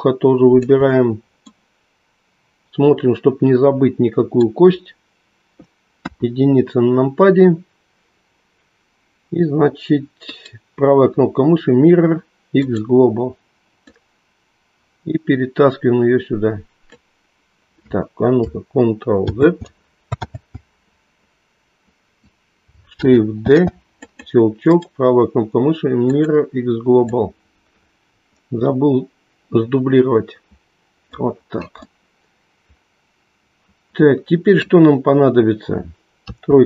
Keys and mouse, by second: 1.4-5.6 middle drag, 6.0 KP_1, 10.4 right click, 13.8-16.9 drag, 19.4 ctrl+z, 20.2 ctrl+z, 23.4 shift+d, 25.3-26.3 right drag, 27.0-31.9 drag, 31.9-35.7 middle drag, 36.2 KP_3.